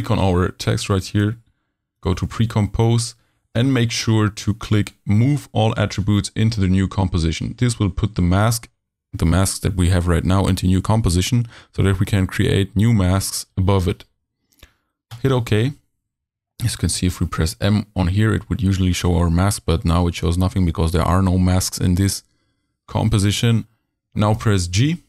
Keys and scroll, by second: 17.0 m, 24.4 g.